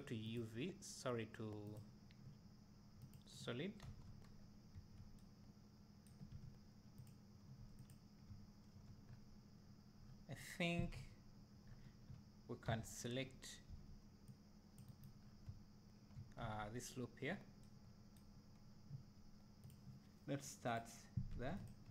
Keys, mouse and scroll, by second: 0.3-0.6 drag, 1.8 click, 3.0 click, 3.9 Tab, 4.3 scroll up 2, 4.8 1, 7.1 alt+click, 7.9 click, 8.3 `, 9.1-9.4 scroll up 1, 10.0 scroll down 1, 11.0 KP_7, 11.7 scroll up 1, 13.2-13.7 scroll up 1, 14.3 c, 15.2 scroll down 1, 15.5 `, 19.6 click.